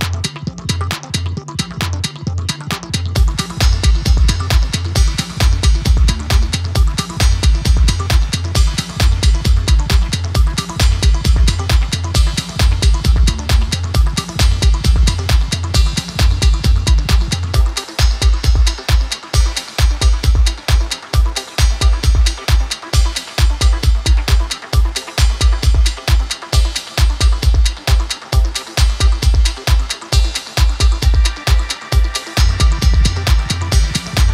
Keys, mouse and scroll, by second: 0.6 alt+shift+click, 1.2 ctrl+b, 2.0 click, 2.5 click, 3.4 scroll down 3, 3.8 scroll up 2, 4.1-5.3 middle drag, 5.3-5.7 scroll down 3, 5.7-6.2 scroll up 1, 6.2 scroll down 1, 6.4 middle click, 6.8 click, 7.2 click, 8.0 scroll up 8, 8.3 middle click, 8.7 scroll down 5, 9.3 click, 9.7 scroll up 2, 9.9 middle click, 10.4-11.8 drag, 12.2 click, 13.0-14.0 drag, 14.0 ctrl+r, 15.3 ctrl+r, 17.5 click, 17.7 middle click, 18.3 ctrl+r, 21.3 click, 22.5 shift+click, 22.9 shift+click, 23.2 shift+click, 23.6 shift+click, 24.2 i, 25.4 click, 26.3 scroll up 3, 26.7 middle click, 27.3-28.3 drag, 28.3 ctrl+r, 30.0 click, 30.8 scroll down 2, 31.1 scroll up 2, 31.3 middle click, 31.8-33.2 drag, 33.3-33.6 scroll down 3, 33.7 click.